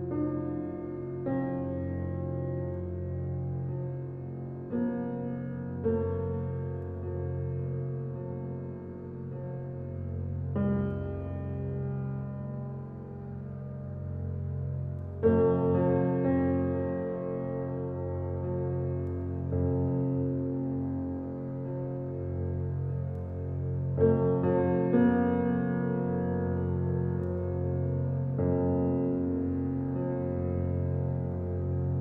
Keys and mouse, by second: 0.4 click, 1.3 Tab, 3.0 click, 5.4 click, 6.5 alt+click, 6.9-8.1 typing, 7.0 click, 9.6-10.3 drag, 10.5 shift+click, 11.6 ctrl+i, 12.2 typing, 12.7 Return, 14.4 alt+a, 14.9-16.4 alt+drag, 16.5-16.9 drag, 17.9-18.5 drag, 19.6 click, 20.0-21.2 alt+drag, 21.0 alt+a, 21.6-24.9 alt+drag, 25.0-26.1 middle drag, 27.4-28.0 alt+drag, 28.0 alt+middle click, 28.2-30.0 alt+drag, 30.2 1, 30.9 alt+shift+middle click, 31.2 alt+shift+click, 31.3 ctrl+alt+middle click, 31.6 ctrl+alt+click, 31.7 ctrl+alt+middle click, 31.8-32.0 alt+shift+drag, 31.8 typing.